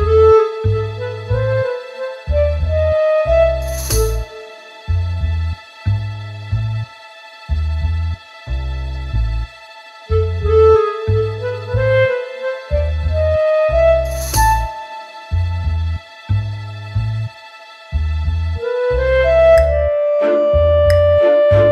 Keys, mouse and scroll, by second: 3.0 shift+right click, 6.2 right click, 8.4 shift+f, 12.9 click, 14.7 click, 15.8 middle click, 16.5 right click, 17.5 middle click, 18.0-18.6 scroll up 2, 18.6 middle click, 19.0-19.6 scroll down 3, 19.8 middle click, 20.0 middle click, 20.6 middle click.